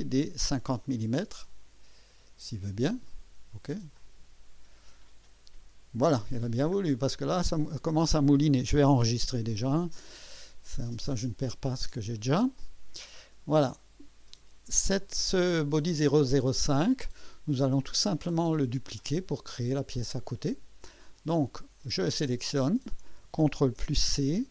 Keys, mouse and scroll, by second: 3.9 click, 6.5-6.8 scroll down 2, 7.1-8.5 drag, 9.0 ctrl+s, 10.3-10.7 scroll up 1, 10.7-11.1 scroll down 1, 11.4 right click, 12.6-14.2 drag, 15.5 click, 21.6 click, 23.7 ctrl+c.